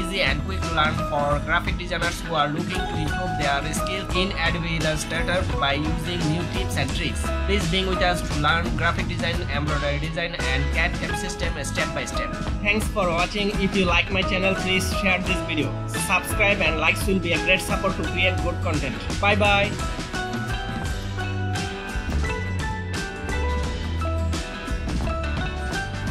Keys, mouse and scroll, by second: 5.7-6.9 super+drag, 9.9 super+click, 11.3 super+F7, 14.1 super+scroll down 1, 14.8 super+F7, 15.9 ctrl+super+0.